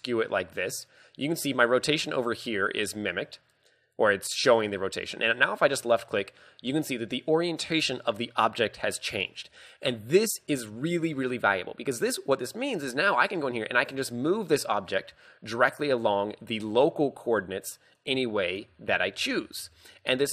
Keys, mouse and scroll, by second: 6.0 click, 6.9 middle click, 9.1 scroll down 1, 10.0 scroll down 1, 12.2 scroll down 4, 13.9 click, 16.5 click, 18.9 ctrl+z, 19.3 ctrl+z.